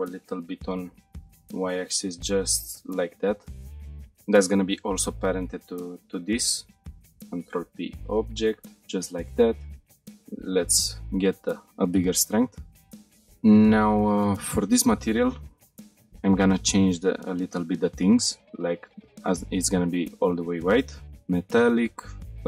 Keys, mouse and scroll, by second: 0.2 x, 1.2 y, 2.9 click, 3.3-3.7 shift+middle drag, 4.7 shift+click, 4.7 middle click, 7.0 ctrl+p, 9.4 click, 9.9 click, 11.3 click, 14.7 click, 15.3-16.4 scroll down 3, 16.4 click, 20.4 click, 21.8-22.4 drag.